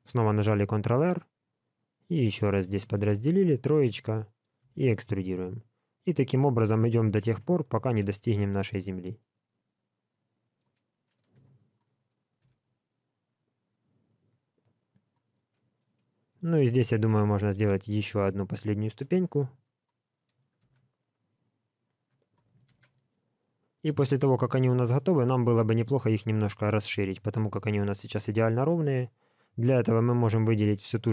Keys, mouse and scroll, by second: 0.2 ctrl+r, 3.2 3, 3.5 click, 4.6 e, 7.8 ctrl+r, 11.3 3, 11.5 click, 12.4 e, 15.7 middle click, 16.6 shift+middle click, 17.5 ctrl+r, 19.3 3, 19.6 click, 20.6 e, 22.7 alt+a, 23.1 middle click, 27.2 middle click, 29.9 click.